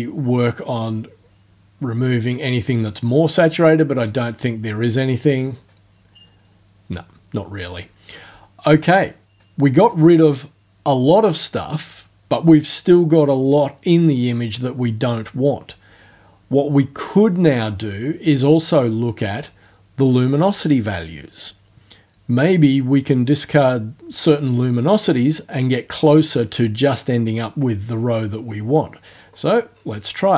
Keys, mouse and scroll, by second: 5.4-7.8 drag, 19.2 click, 29.3-30.3 drag.